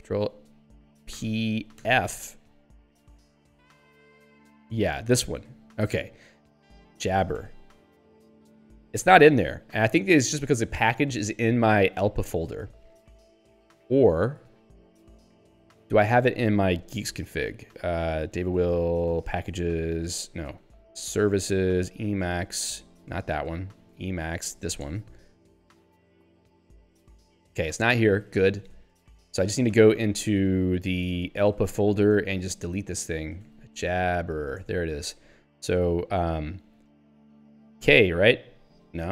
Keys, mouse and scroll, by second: 1.8 ctrl+f, 5.0 Return, 6.8-8.0 typing, 9.0 ctrl+g, 16.3 ctrl+f, 16.9 alt+h, 18.3-19.8 typing, 18.5 Tab, 20.7 alt+h, 20.8-22.0 typing, 22.2 Tab, 23.4 alt+h, 23.7-24.5 typing, 24.6 ctrl+n, 25.8 Return, 26.3-27.2 typing, 28.0 ctrl+g, 29.0 Return, 30.1 ctrl+f, 30.7 alt+h, 31.3-32.2 typing, 32.3 Return, 33.5 ctrl+s, 33.8 j, 34.0 b, 34.7 Return, 37.8 k.